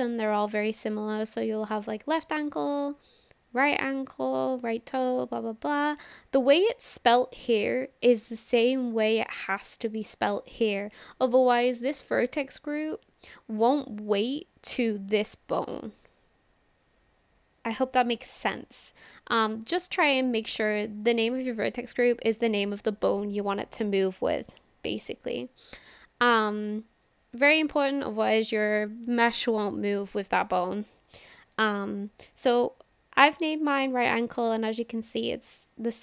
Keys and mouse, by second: 26.9-28.3 drag.